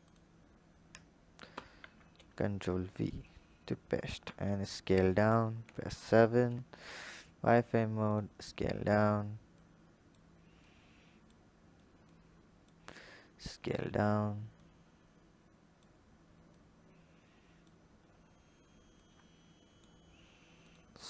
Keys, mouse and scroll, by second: 1.3 ctrl+v, 2.1-3.1 scroll down 3, 3.1 click, 4.1 s, 5.5 KP_7, 6.0-6.9 scroll up 5, 6.9 click, 7.3 s, 8.2-9.4 scroll up 4, 9.4 click, 10.4 click, 11.9 click, 12.8 s, 14.4 click, 16.3 click, 17.7-18.8 scroll down 2, 18.8 click, 20.4 click, 20.9-21.0 scroll up 1.